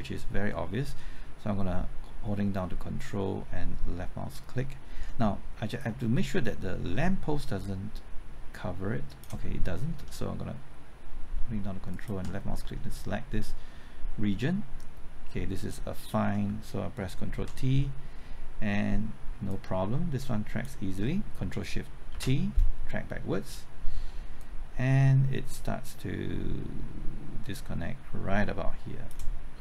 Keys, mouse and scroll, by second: 5.7-9.5 drag, 9.7 scroll up 1, 11.9 ctrl+click, 16.9 typing, 17.3 ctrl+t, 19.5-21.4 drag, 21.4 typing, 22.1 ctrl+shift+t, 24.3-27.5 drag, 27.6-29.5 drag.